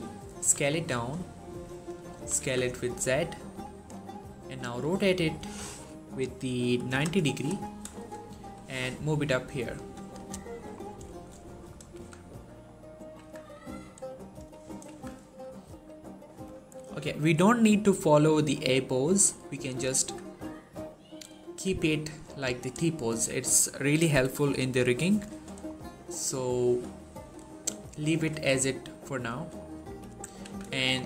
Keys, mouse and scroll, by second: 0.2 s, 1.6 click, 2.0 s, 2.2 z, 3.5 click, 4.3 r, 8.3 typing, 10.0 click, 10.3 shift+middle click, 10.6-11.0 shift+scroll up 2, 11.0 shift+middle click, 11.6 scroll down 1, 11.8 z, 12.5-13.1 scroll up 1, 13.1 z, 14.5 scroll up 1, 14.7 z, 15.1 shift+middle click, 17.6-19.3 scroll down 1, 19.4 shift+middle click, 19.8 z, 22.6 z, 22.9 shift+middle click, 25.4 shift+middle click, 27.3 shift+middle click, 28.1 3, 29.5 shift+middle click, 29.9-30.4 typing, 30.6 shift+middle click, 30.8 scroll up 1.